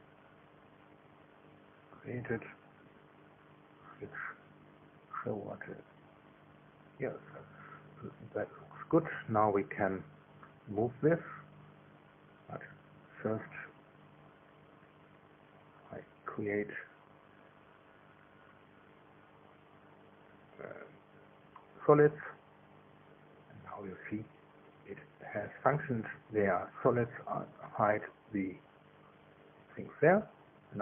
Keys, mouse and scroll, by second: 1.0 click, 1.5 space, 2.7-4.1 middle drag, 4.1-6.8 drag, 5.9 space, 6.6 space, 7.0 space, 10.1-11.9 drag, 12.0 KP_2, 16.7 click, 19.0 shift+click, 20.2 click, 21.3 click, 23.7-26.5 scroll up 2, 26.7 scroll up 2, 27.2-27.6 scroll up 2, 28.0 scroll up 2, 29.7 space.